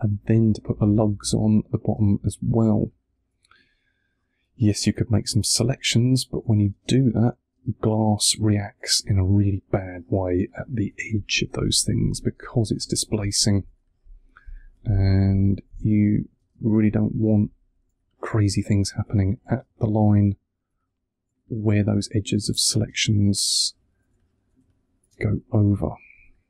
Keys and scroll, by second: 1.3 space, 2.7 2, 6.6 space, 8.2 2, 11.7 space, 13.0 2, 15.6 space, 17.3 2, 19.4 space, 20.6 2, 22.3 space, 23.4 2, 25.0 space, 26.1 2.